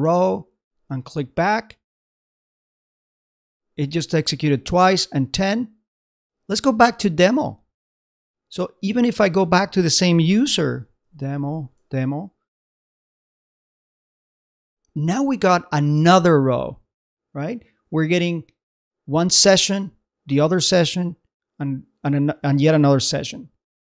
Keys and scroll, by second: 2.6 super+Tab, 6.1 super+Tab, 14.1 super+Tab.